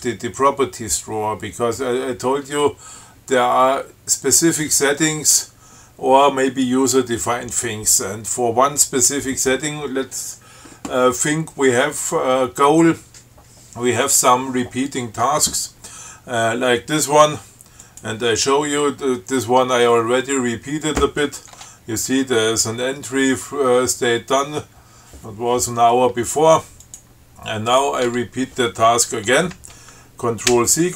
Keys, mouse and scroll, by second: 18.0 click, 21.1 click, 21.8 Tab, 27.1 click, 27.9 click, 28.3 Tab, 30.8 ctrl+c.